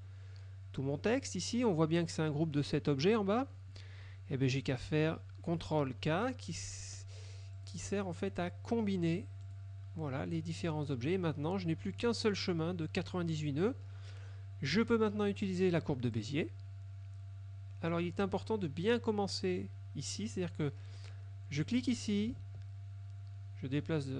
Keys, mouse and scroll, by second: 0.0 click, 7.7 click, 9.5 click, 16.3 click, 21.7 click.